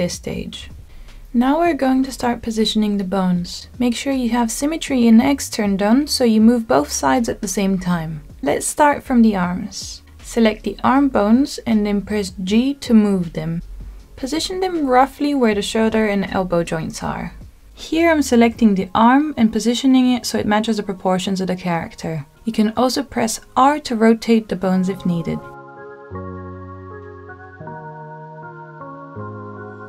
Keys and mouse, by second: 0.5 shift+middle click, 1.4 KP_1, 2.7 shift+middle click, 3.7 click, 10.0 click, 11.0 click, 11.8 g, 18.8 click, 20.1 click, 21.5 g, 23.2 click, 24.8 r, 27.2 click, 27.8 g.